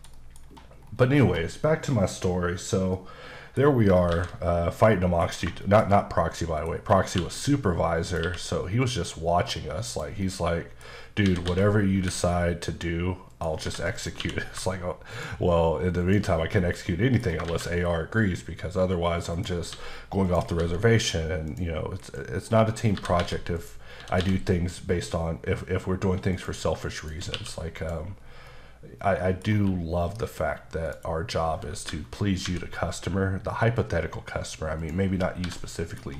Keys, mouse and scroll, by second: 0.4-2.9 scroll up 7, 2.9 middle click, 3.7 scroll down 2, 4.1 shift+a, 4.9 middle click, 5.3 scroll up 2, 5.6 shift+middle click, 6.7-7.1 scroll up 2, 7.1 q, 8.1 click, 8.2 q, 9.5-9.9 scroll down 1, 9.9 click, 10.2 middle click, 11.2-12.0 typing, 13.3 click, 13.6 h, 13.9 click, 14.2 q, 15.1 shift+click, 16.0 shift+double click, 16.3 scroll down 2, 16.6 middle click, 17.3 scroll down 1, 17.5 shift+a, 19.3 click, 19.7 s, 20.3 click, 20.6 s, 21.5 click, 22.0-24.2 typing, 22.4-22.9 scroll down 5, 23.5 click, 23.9 scroll down 1, 26.3 click, 27.0 shift+click, 27.3 q, 27.7 click, 28.2-28.5 scroll down 2, 28.5 middle click, 29.5 q, 30.8 click, 31.7-32.4 typing, 34.8 click, 35.2 scroll down 2, 35.4 h, 35.6 middle click, 36.0 scroll down 1.